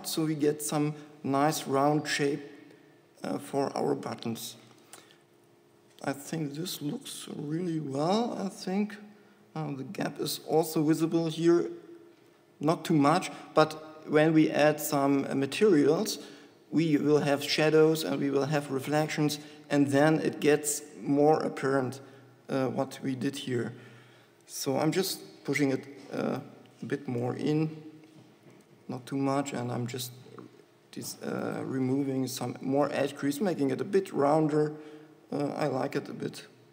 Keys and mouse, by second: 5.1 click, 6.0 Tab, 22.1 shift+e, 23.4 Tab, 25.8 g, 27.2 g, 29.7 shift+e, 33.1 shift+e.